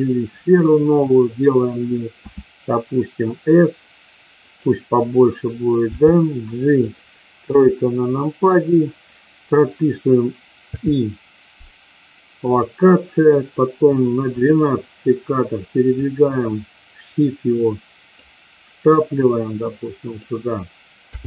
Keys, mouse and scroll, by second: 2.2 s, 4.3 click, 5.8 g, 6.8 click, 7.4 KP_3, 10.6 i, 14.3 click, 15.9-18.2 drag, 18.8-20.2 drag, 20.9 i.